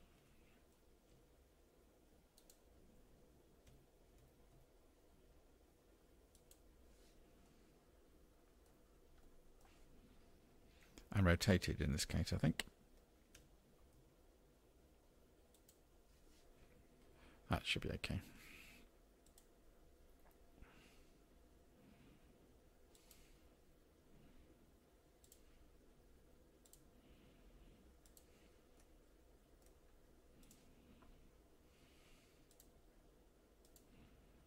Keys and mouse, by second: 0.2 s, 3.7 g, 7.5 middle click, 7.6-8.3 drag, 8.3-8.6 middle drag, 9.2 middle click, 13.4 r, 19.3 click, 20.8-21.4 drag, 21.5 middle click, 23.0-24.6 drag, 25.5-25.9 drag, 26.3 click, 27.2 middle click, 27.8 click, 28.5 drag, 29.2 n, 30.3-34.4 drag.